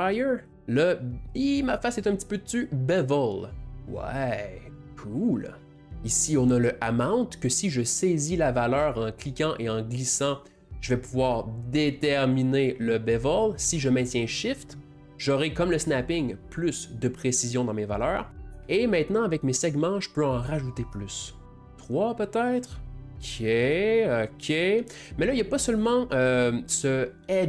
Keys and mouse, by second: 0.4-2.1 drag, 2.1 click, 2.2 click, 9.6-12.7 drag, 20.8 middle click, 21.4 click, 22.7 click, 23.8-25.1 drag.